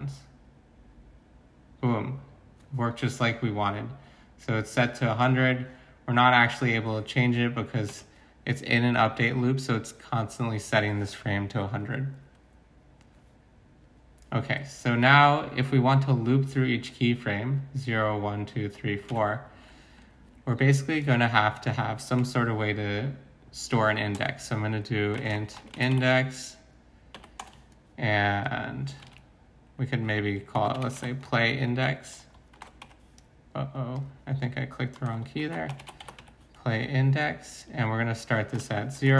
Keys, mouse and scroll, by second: 7.9 alt+Tab, 19.1 alt+Tab, 24.2 Return, 25.1-27.6 typing, 29.0 ctrl+c, 30.3-31.1 typing, 32.3-33.3 typing, 35.1-36.2 typing, 38.3-39.1 typing.